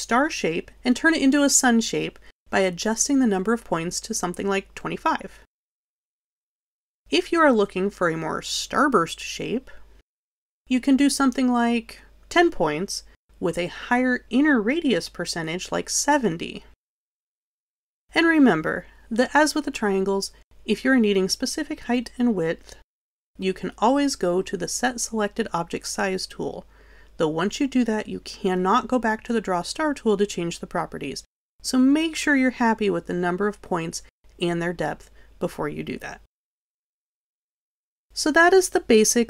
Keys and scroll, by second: 3.4 2, 13.2 7, 33.3 7, 35.1 6.